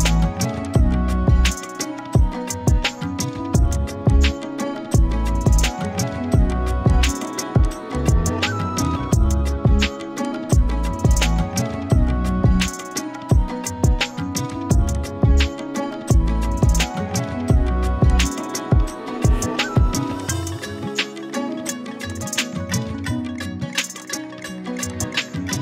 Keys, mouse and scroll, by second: 4.6 right click, 5.8 click, 6.4-7.9 typing, 6.5 click, 7.2 click, 7.7 click, 8.0 click, 11.2 ctrl+z, 12.6 click, 14.9-16.5 drag, 16.6 z, 16.8 click, 17.1 z, 18.1 click, 23.4 ctrl+z, 23.9 click, 24.3-24.9 z, 24.8 space, 24.9 click.